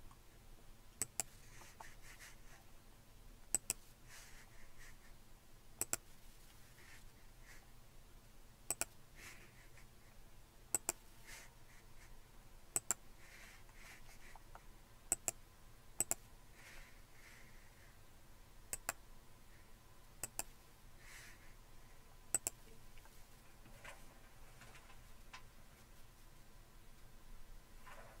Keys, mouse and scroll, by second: 1.1-2.3 drag, 3.6-5.0 drag, 5.8 click, 8.7 click, 9.7 click, 10.8-12.4 drag, 12.8-14.1 drag, 15.1 click, 16.0 click, 18.8 click, 20.3 click, 21.6-23.5 drag.